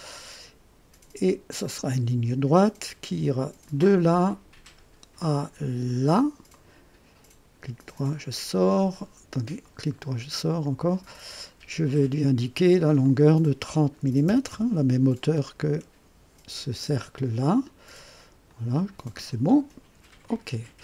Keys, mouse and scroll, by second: 1.6 click, 3.6 click, 5.8 click, 6.5 right click, 9.6 right click, 10.8 click, 13.0 click, 14.2 KP_0, 14.5 KP_Enter, 18.4-19.4 drag, 20.2 click.